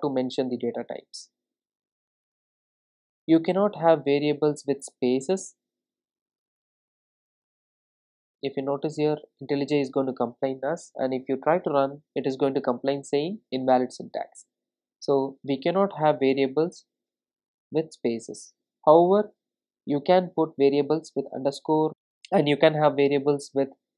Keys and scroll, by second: 11.3 super+r.